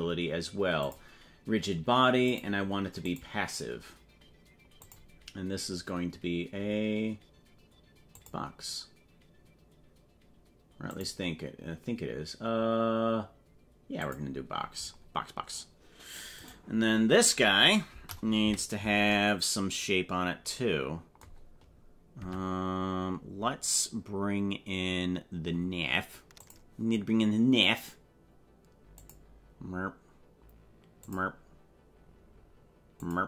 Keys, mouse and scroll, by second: 0.8 click, 2.4 click, 4.8-8.2 drag, 11.0-14.2 drag, 16.4 right click, 18.4 KP_Decimal, 22.2 Tab, 26.4 click, 28.9-30.2 drag.